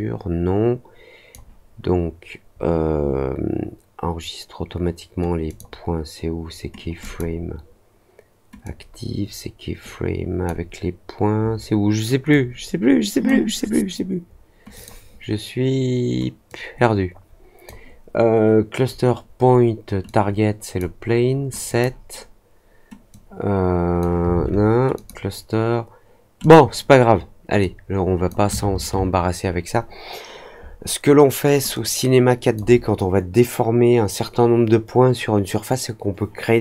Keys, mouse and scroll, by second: 5.4 click, 6.9 click, 8.6-10.4 drag, 12.2-13.2 drag, 14.7 click, 16.4-17.6 drag, 20.0-20.7 drag, 21.6 click, 23.0 click, 24.9 click, 26.3 click, 27.5 click, 31.7 click.